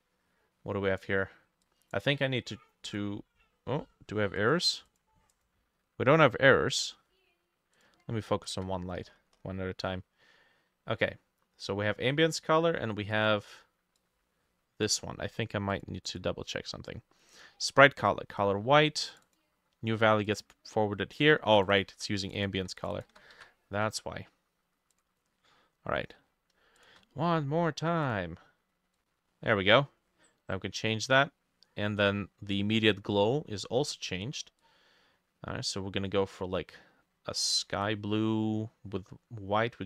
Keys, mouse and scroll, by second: 5.4-7.4 drag, 8.6-11.5 drag, 8.6 f, 9.1-10.0 scroll up 12, 16.1-18.1 drag, 19.3-23.6 drag, 21.9 ctrl+middle click, 22.0 ctrl+c, 22.5 middle click, 22.6 ctrl+v, 23.0 middle click, 23.1 ctrl+v, 23.4 ctrl+s, 26.3-26.6 scroll up 2, 26.8 shift+click.